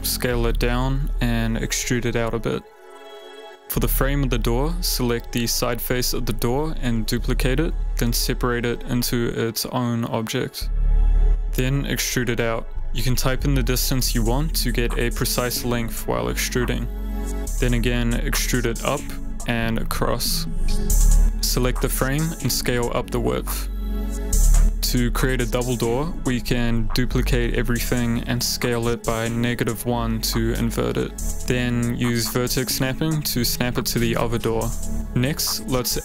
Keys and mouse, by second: 1.0-2.3 typing, 2.9 click, 4.0 Tab, 4.1 click, 4.6 click, 5.2 shift+click, 7.2 shift+d, 8.8 p, 9.7 Tab, 10.1 click, 10.4 click, 10.9 ctrl+a, 11.7 Tab, 11.9 e, 11.9 x, 11.9 y, 14.1 KP_1, 15.1 BackSpace, 15.3 BackSpace, 16.3 ., 16.5 KP_3, 18.0 Return, 18.0-19.8 typing, 19.7 Return, 21.7 Tab, 21.7 click, 22.0 a, 22.5 click, 23.2 click, 23.4 s, 23.4 x, 25.3 click, 25.9 g, 26.2 x, 26.9 y, 27.5 click, 27.8 shift+click, 28.8 s, 29.3 y, 29.5 KP_Subtract, 29.6 KP_1, 30.8 Return, 32.1 g, 33.3 ctrl+click, 33.7 click, 34.4 Tab, 35.0 Tab, 35.1 a, 35.3 a, 35.6 middle click.